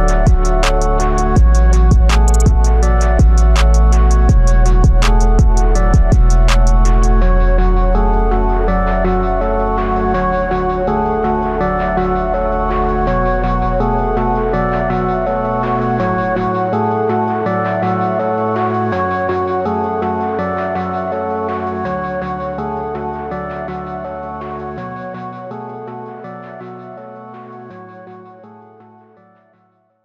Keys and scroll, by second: 1.9 x, 10.6 x, 17.8 ctrl+alt+z, 18.3 ctrl+alt+z.